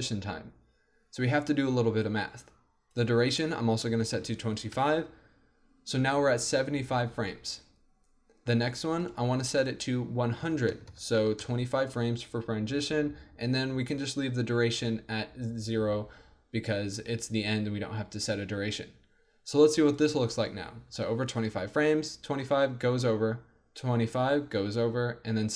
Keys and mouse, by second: 10.9 KP_0, 20.0-22.4 drag, 20.9 alt+a.